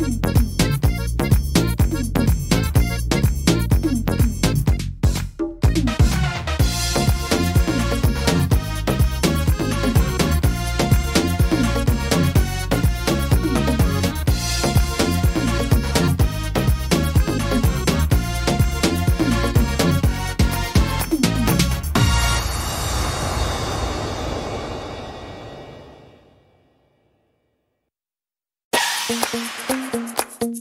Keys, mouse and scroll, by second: 1.7 right click, 2.4 shift+right click, 2.9 right click, 3.6 shift+right click, 4.0 shift+right click, 4.5 shift+right click, 4.9 shift+right click, 5.2 shift+right click, 5.6 shift+right click, 6.0 shift+right click, 6.4 middle click, 7.1-7.5 scroll down 2, 7.4 middle click, 8.7 e, 10.3 middle click, 11.2-11.7 scroll up 4, 12.8 click, 15.2 middle click, 15.9 right click, 16.7 right click, 17.9 click, 18.7 right click, 19.7 x, 21.3 right click, 22.0 x, 23.2 middle click, 23.8-24.3 scroll up 2, 24.5 middle click, 25.8 click, 26.5 right click, 27.6 shift+right click, 28.6 click, 29.9 middle click, 30.2-30.6 scroll down 6.